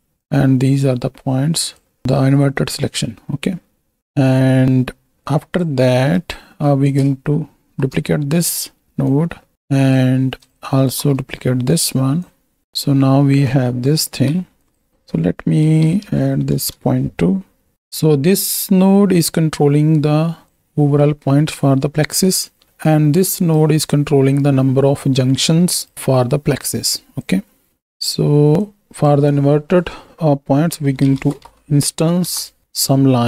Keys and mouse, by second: 0.1-1.8 drag, 2.0-4.0 drag, 5.3 click, 6.2 ctrl+click, 6.9 click, 7.6 shift+d, 9.1-9.9 drag, 10.9 shift+d, 11.6 click, 12.3 drag, 14.6 alt+shift+click, 14.9-16.7 drag, 17.9-19.4 right drag, 20.4-22.6 drag, 22.8-23.6 right drag, 23.9-25.9 right drag, 26.3 middle click, 27.2 click, 28.6-32.3 drag.